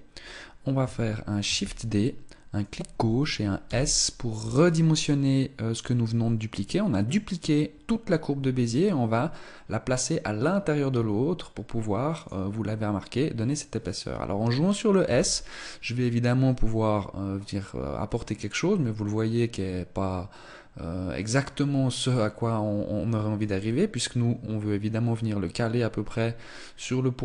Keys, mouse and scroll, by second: 1.4 shift+d, 3.5 s, 14.9 s.